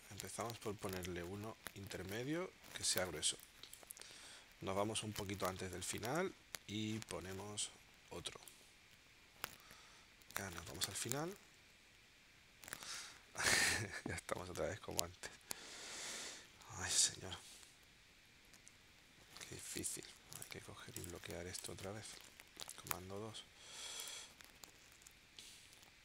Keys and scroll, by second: 3.3 space, 19.6 v, 22.6 super+2, 24.9 shift+w.